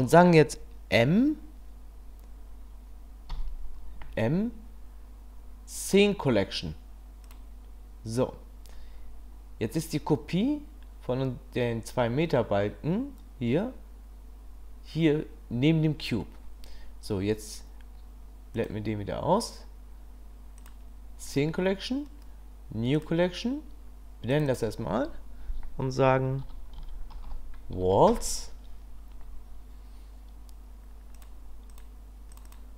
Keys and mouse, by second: 3.3 m, 18.5 click, 22.1 click, 24.4-29.8 drag, 32.5-32.7 drag.